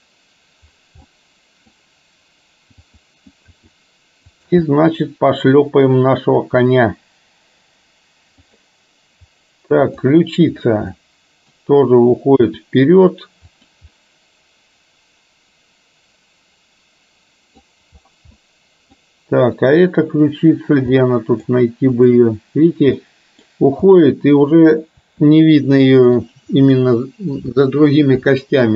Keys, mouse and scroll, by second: 1.1-1.8 middle drag, 3.0 click, 3.6 r, 4.6-6.0 middle drag, 6.5 g, 9.9 click, 11.0-11.5 middle drag, 12.5 r, 13.9-17.8 middle drag, 18.4-19.1 middle drag, 21.0-21.5 middle drag, 22.3 click, 23.0-23.4 middle drag, 24.0-24.4 middle drag, 25.1 r, 26.8-27.5 middle drag.